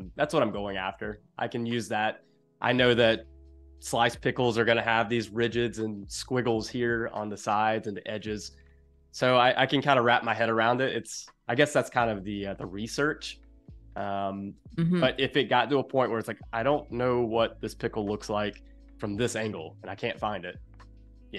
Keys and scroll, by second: 14.7 space, 18.0 space.